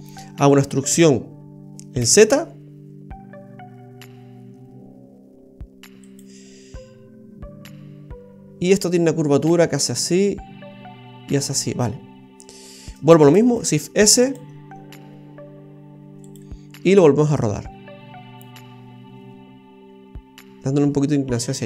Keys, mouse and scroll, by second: 0.9 e, 13.5 shift+s, 14.5 s, 17.3 click.